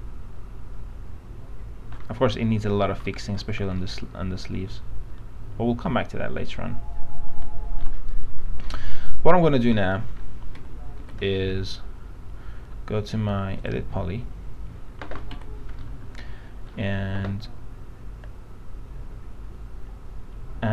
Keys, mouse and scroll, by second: 3.3 alt+middle click, 4.0-8.0 alt+middle drag, 8.3 middle click, 10.8 alt+F4, 11.2 alt+F4, 13.8 click, 15.5 F4, 16.0 alt+middle click.